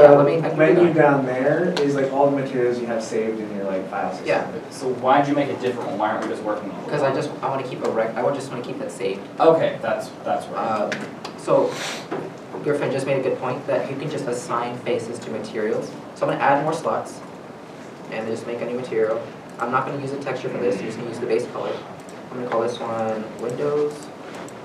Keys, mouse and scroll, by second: 23.4 middle click, 23.5-24.0 typing, 24.0 Return.